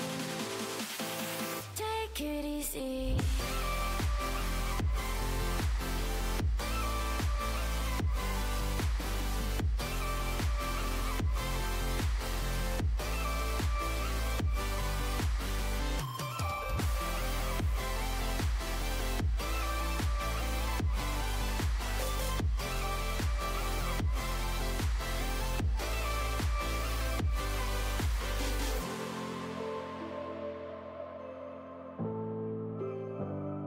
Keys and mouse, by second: 0.4 Tab, 2.4 x, 4.2-5.6 middle drag, 5.8-7.9 middle drag, 9.2 x, 13.0 z, 14.0 z, 14.4 Tab, 17.1 Tab, 19.4 z, 20.7 z, 21.8 z, 23.8 z, 28.0 Tab.